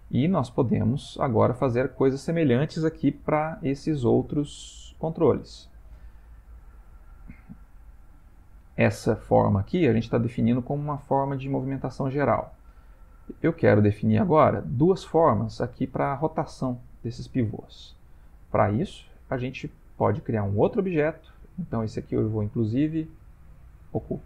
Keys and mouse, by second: 0.1 shift+middle click, 0.7 ctrl+middle click, 1.5 shift+middle click, 3.0 middle click, 4.3 ctrl+middle click, 5.3 middle click, 5.7 middle click, 6.4-6.8 ctrl+middle click, 6.6 ctrl+middle click, 7.1 middle click, 7.8-8.3 shift+middle click, 8.5 ctrl+middle click, 9.7 middle click, 9.9 middle click, 10.1 middle click, 12.3-12.8 middle click, 12.5 middle click, 17.6 shift+middle click, 18.3 ctrl+middle click, 21.6 click, 23.9 click.